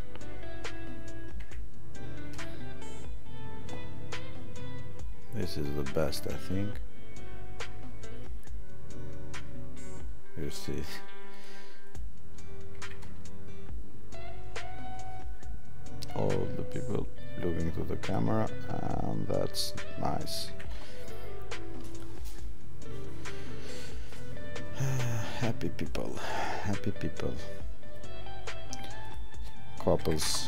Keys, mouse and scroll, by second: 18.0 click, 21.9 click, 29.0 click.